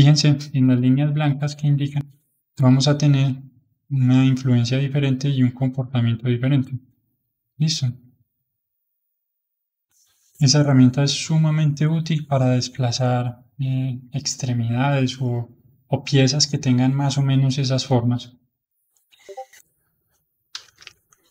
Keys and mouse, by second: 2.0-5.0 drag, 19.3-21.3 drag.